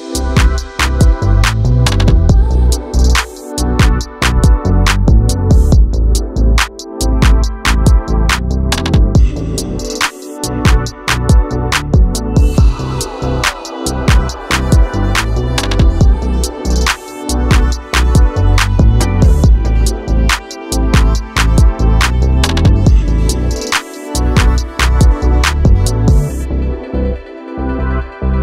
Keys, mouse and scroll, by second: 0.8 r, 2.3-3.1 middle drag, 3.1 KP_1, 3.8 drag, 4.0-4.7 scroll up 3, 4.7-5.3 scroll up 2, 5.3-6.6 drag, 6.6 shift+d, 7.8 s, 9.0 g, 10.4 s, 11.1 g, 12.1 drag, 12.3 scroll down 4, 12.5-13.8 middle drag, 13.8 KP_1, 14.2-14.6 scroll up 6, 14.6-14.9 shift+middle drag, 14.9 shift+a, 18.3 scroll down 5, 18.6-19.1 middle drag, 19.1 KP_7, 19.7 s, 20.7 g, 22.6 shift+middle click, 22.8 scroll up 1, 23.0 Tab, 23.3 click, 24.2 g, 26.2 click, 26.5 s, 27.7 g.